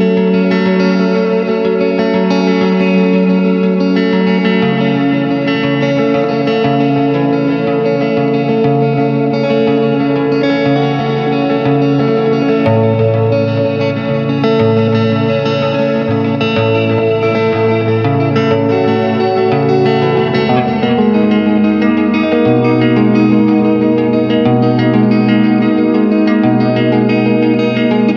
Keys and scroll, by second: 0.2 ctrl+space, 1.7 ctrl+g, 2.5 Return, 5.7 s, 7.2 ctrl+space, 7.7 ], 8.9 space, 9.7 space, 16.8 space, 20.3 [.